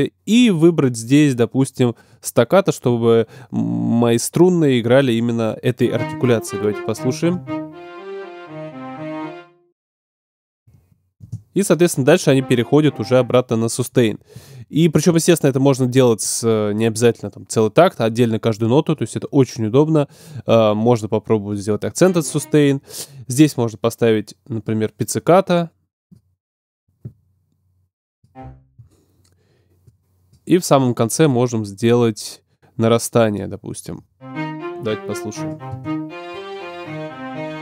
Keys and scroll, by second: 5.7 space, 9.5 space, 34.0 space.